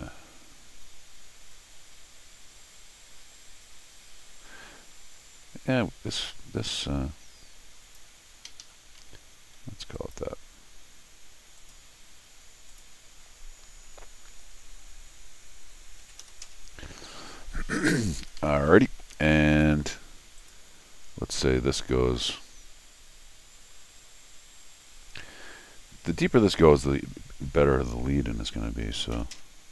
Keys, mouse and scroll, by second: 0.0 Escape, 1.5-7.9 drag, 8.5 Escape, 8.6 Escape, 9.9 click, 11.6 click, 12.7 click, 18.2 Escape, 18.4 Escape, 19.7 d, 20.4 click, 21.3 click.